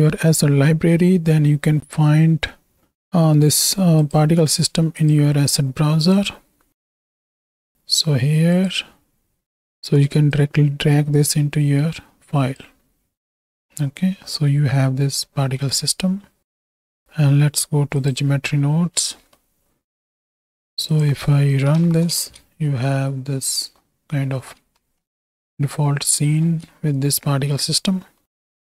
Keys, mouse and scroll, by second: 4.9-6.4 drag, 7.5 click, 8.6 click, 13.2-13.9 middle drag, 14.4-15.5 middle drag, 16.8-18.1 drag, 19.3 middle drag, 19.7 Home, 20.9 click, 21.8 shift+Right, 22.2 shift+Left, 22.3 space, 23.8-24.7 middle drag, 25.3 alt+a, 26.0-26.7 drag, 26.7 space, 28.0 middle click.